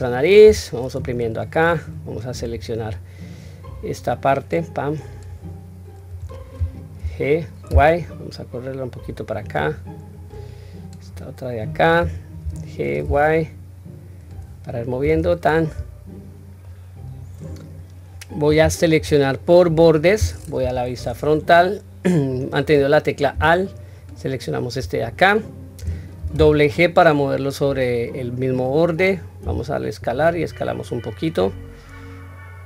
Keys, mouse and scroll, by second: 0.2 1, 3.1-5.0 drag, 9.8-10.8 drag, 12.1 g, 14.4-14.8 scroll down 1, 14.9 q, 15.3-16.4 middle drag, 16.6 scroll down 1, 17.1 scroll up 1, 18.7 2, 20.3 KP_1, 20.8 scroll up 1, 23.7 alt+click, 25.9 g.